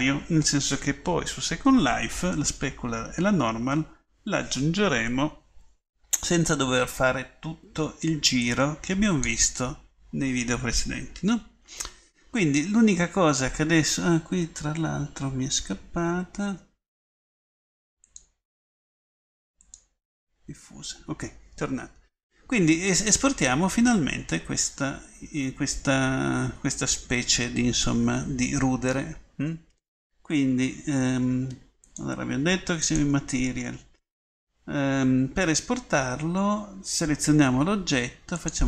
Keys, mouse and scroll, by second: 23.7-26.0 middle drag, 38.4-38.6 drag.